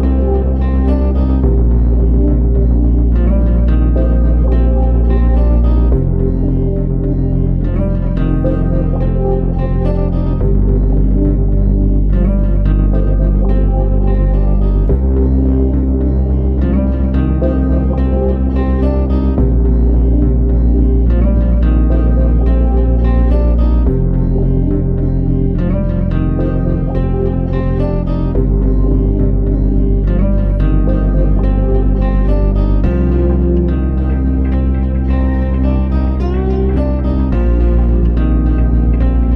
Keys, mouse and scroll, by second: 1.2-2.6 scroll up 1, 5.2 r, 8.8 KP_Decimal, 11.0 scroll down 2, 12.5 s, 14.9 scroll down 3, 15.4 shift+middle click, 16.8 Tab, 18.3 Tab, 19.3 click, 20.4 click, 24.4 click, 24.4 click, 29.3 Tab, 30.8 click, 31.4-32.5 scroll down 8, 34.4 scroll down 4, 35.2 click.